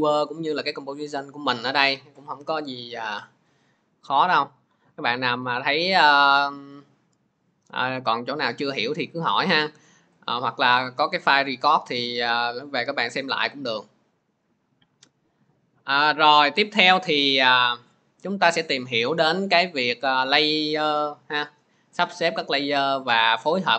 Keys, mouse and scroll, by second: 2.7 click, 5.3 click, 5.7 click, 9.4 click, 10.1 click, 12.0 click.